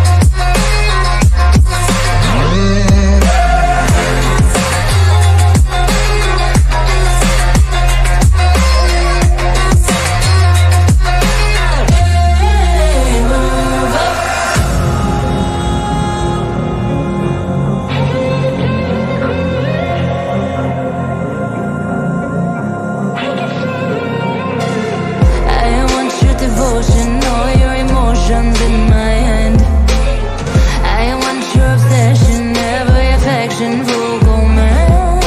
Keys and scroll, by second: 0.8 F3, 4.7 Escape, 6.9 shift+F2, 7.0 Escape.